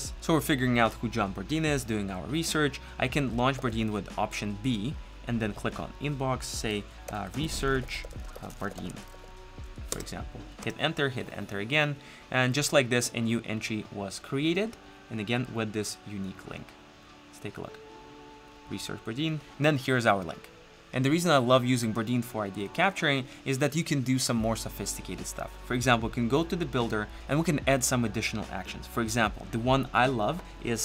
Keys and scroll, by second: 3.6 alt+b.